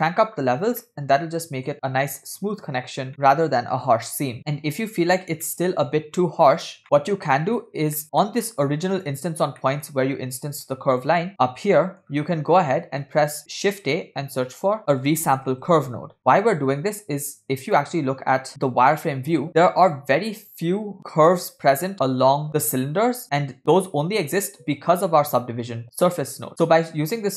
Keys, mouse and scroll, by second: 0.9-1.7 middle drag, 1.7 scroll down 2, 2.6-3.1 scroll down 2, 3.1-3.9 middle drag, 4.3 scroll down 1, 4.4 scroll up 2, 4.9-5.2 scroll up 2, 5.5 shift+middle click, 6.8 scroll down 3, 6.8-7.8 middle drag, 8.0 middle click, 8.0 scroll up 1, 8.2 middle click, 8.6 scroll up 1, 9.0 click, 9.6 middle click, 10.5 click, 11.3 middle click, 11.3-11.7 scroll down 9, 12.4 scroll up 6, 13.0-13.6 scroll up 4, 13.1 middle click, 13.6 shift+a, 18.0 click, 19.5 scroll up 1, 26.5-27.3 drag.